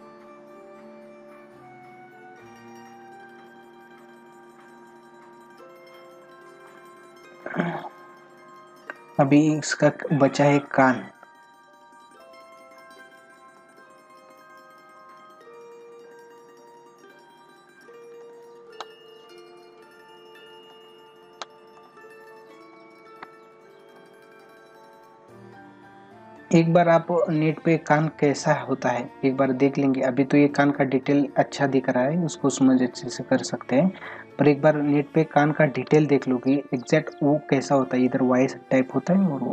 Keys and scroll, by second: 13.6 space, 14.8 ctrl+-, 15.4 ], 18.2 space, 19.4 ], 20.7 space, 35.7 ctrl+alt+z.